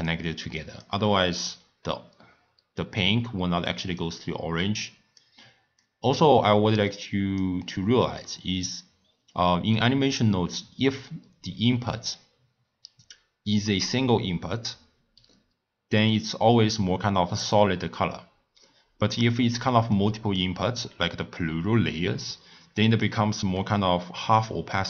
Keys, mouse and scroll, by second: 0.5 click, 1.4 click, 4.6 click, 5.8 click, 6.9 click, 16.1 click, 19.9-22.6 middle drag, 22.6 scroll down 1, 22.8 click, 23.5-24.0 scroll down 2, 24.0-24.4 scroll up 4, 24.4-24.8 scroll down 1.